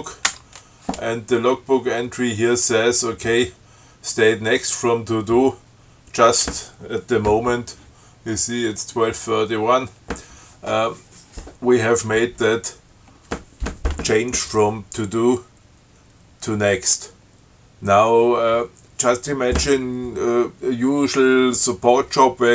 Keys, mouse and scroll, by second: 0.0 click, 0.5 Tab.